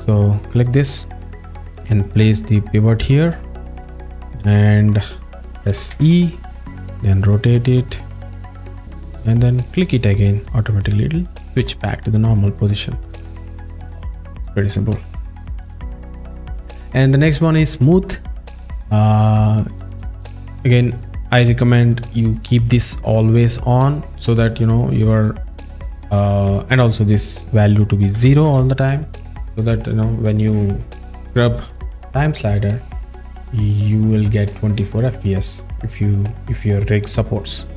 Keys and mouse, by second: 0.6 click, 2.3 click, 5.9 e, 9.9 click, 15.2 middle click, 20.2 click, 20.9 click, 27.2-28.5 drag.